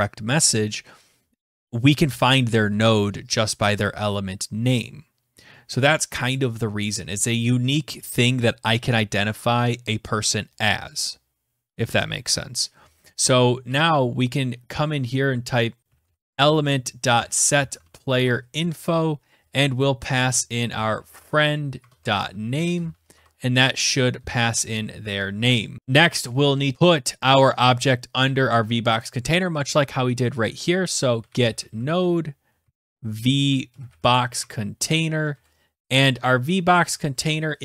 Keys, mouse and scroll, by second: 13.7 Return, 15.3-18.4 typing, 20.0-24.7 typing, 30.8-37.2 typing, 34.3 Tab, 37.2 alt+Tab.